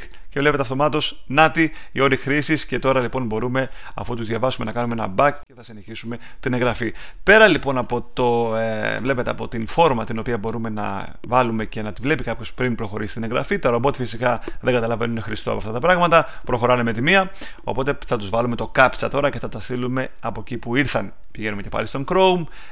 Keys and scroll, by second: 18.6 super+Tab.